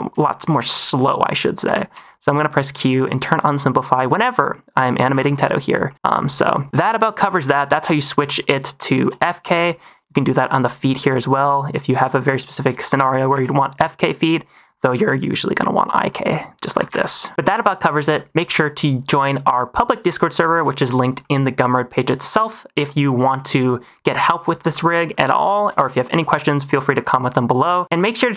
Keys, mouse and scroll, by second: 0.2 shift+middle drag, 1.8 q, 2.7 q, 2.9 q, 3.3 middle click, 5.8 shift+middle click, 6.4 click, 6.7 r, 7.4 alt+r, 8.9 n, 9.4 shift+middle drag, 10.5 click, 10.8 middle drag, 11.7 middle drag, 12.2 middle drag, 12.7 shift+middle drag, 13.2 g, 14.5 middle click, 14.7 -, 14.9 g, 16.0 middle drag, 16.8 alt+g, 17.3 -, 18.1 shift+middle click, 19.5 click, 20.2 n, 21.1-22.2 shift+middle drag, 22.7 a, 22.8 click, 23.3 middle click, 24.5 shift+middle drag, 24.8 middle drag, 25.4 shift+middle click, 25.9 middle click, 26.5 click, 26.9 click, 27.2 middle drag.